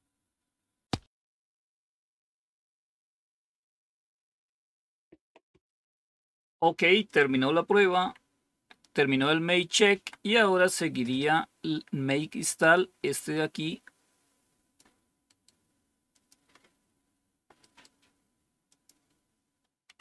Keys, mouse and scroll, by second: 7.0 click, 7.9 Up, 9.8 Down, 11.4-12.3 scroll down 1, 12.3-13.0 scroll down 1, 13.0-14.7 drag, 16.1 click, 18.6 click, 19.9 Right.